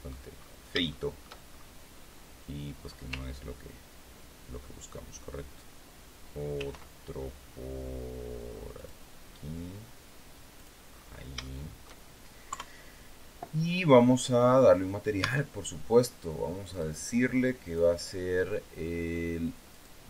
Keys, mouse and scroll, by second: 0.3 scroll up 1, 0.8 shift+middle click, 1.3-1.7 shift+scroll up 1, 6.4 ctrl+r, 8.7 click, 10.5 click, 10.8 scroll down 2, 11.3 shift+middle click, 12.4 KP_3, 15.1 Tab, 16.6 click, 17.5 click, 19.6 click.